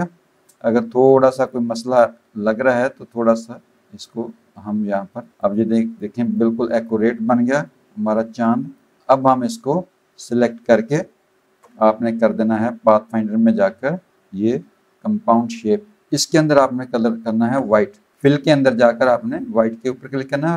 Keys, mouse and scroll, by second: 0.9 click, 1.4 click, 2.7 click, 5.9 click, 7.6 click, 9.4 click, 13.0 click, 16.1 click, 16.7 click, 18.1 click, 19.2 click, 20.2 click.